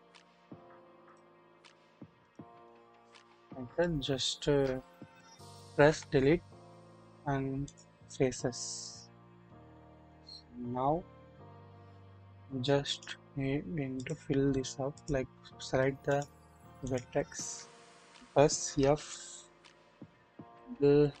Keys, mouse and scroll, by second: 1.0 ctrl+click, 1.8 ctrl+click, 2.2 ctrl+click, 3.8 shift+middle click, 5.9 Delete, 8.9-10.1 drag, 11.3-11.7 scroll up 1, 12.9 click, 13.9 click, 14.9 shift+click, 16.0 shift+click, 18.7 f, 20.6-21.2 drag.